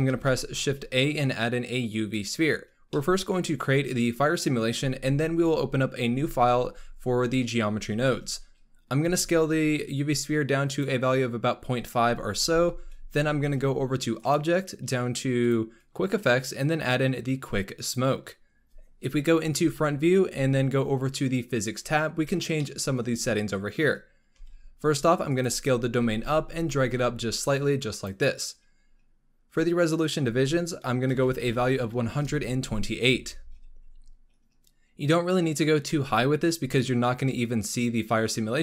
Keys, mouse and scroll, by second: 0.0 shift+a, 2.8-5.2 middle drag, 5.2-6.0 scroll up 1, 6.0 n, 7.7-9.0 scroll up 2, 9.0 s, 12.3 n, 14.1-18.5 drag, 19.6 KP_1, 20.5 scroll up 2, 21.6 click, 22.0-22.4 scroll down 2, 22.5-23.0 shift+middle drag, 23.0-24.3 scroll up 2, 24.3 s, 25.6-25.9 scroll down 2, 25.9 g, 28.4-29.3 scroll up 3, 29.9-34.2 drag.